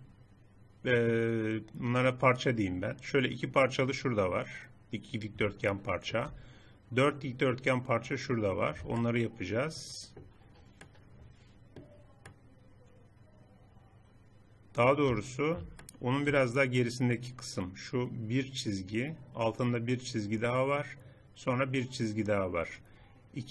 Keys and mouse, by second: 5.7 middle click, 8.5-9.7 middle drag, 9.8 middle click, 11.0 middle click, 12.3 middle click, 12.6-15.0 middle drag, 15.8-16.8 middle drag.